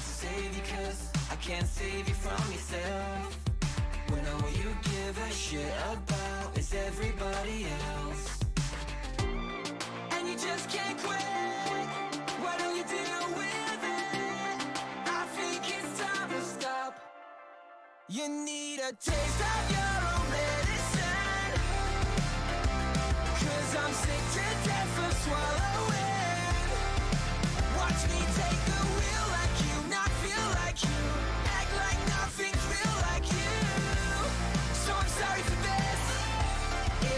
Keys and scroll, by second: 2.5-3.4 typing, 3.7 Return, 11.9-13.6 typing, 21.1-23.3 typing, 23.5 Return, 28.1 q, 33.6-35.2 typing, 35.2 Return.